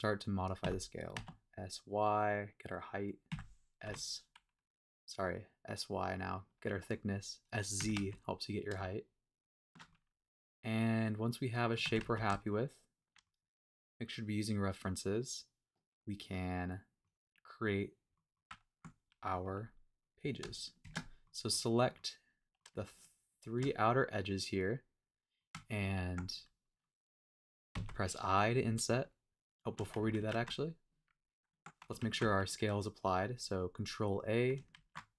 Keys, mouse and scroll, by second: 0.3 click, 0.6 s, 1.2 z, 2.9 click, 3.3 s, 3.8 y, 6.3 click, 6.6 middle click, 7.2-7.8 scroll up 2, 7.8 s, 8.0 z, 9.7 shift+click, 9.9-11.7 middle drag, 11.7 click, 11.8 s, 12.0 z, 13.1 shift+click, 13.3-17.1 middle drag, 18.1 middle click, 18.5 Tab, 19.0 scroll up 1, 19.3 middle click, 19.5 scroll down 1, 20.0 click, 20.8 shift+click, 21.2 middle click, 21.9 middle click, 23.4 shift+click, 23.8-25.4 shift+middle drag, 25.5 Tab, 29.6 shift+right click, 30.2 super+z, 30.3 super+a, 31.5 Tab, 32.0 super+a, 34.7 super+a.